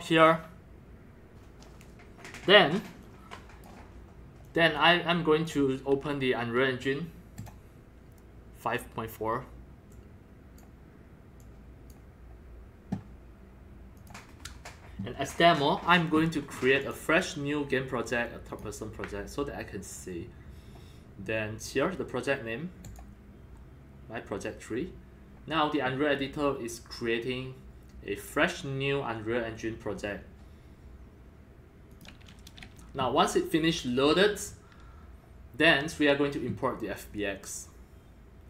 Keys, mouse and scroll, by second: 3.0-3.6 drag, 4.5 drag, 5.4 click, 7.4 click, 9.9-10.6 drag, 11.4 click, 14.0 click, 15.1-16.9 drag, 18.5 click, 19.3 drag, 23.0-23.6 drag, 24.0 click, 24.2 click, 26.4 drag, 27.8 click, 31.9 click, 33.9 click, 35.1 click, 37.0-38.4 drag.